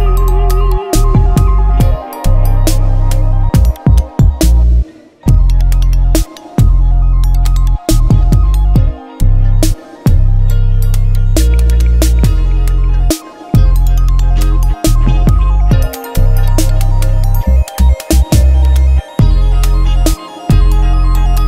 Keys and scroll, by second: 0.9 F9, 2.2-3.4 typing, 6.6 F7, 9.6-12.4 typing, 19.7 t, 20.9 ctrl+a, 21.1-21.4 typing.